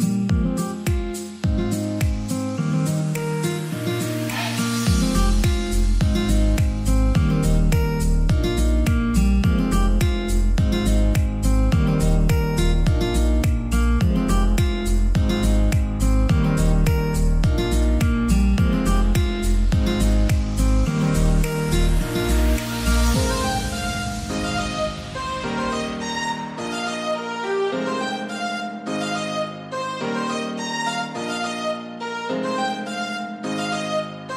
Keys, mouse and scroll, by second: 0.8-13.0 drag, 13.0-14.9 scroll up 1, 15.0 scroll down 1, 17.4-23.8 drag, 23.8-34.3 drag, 27.9 typing.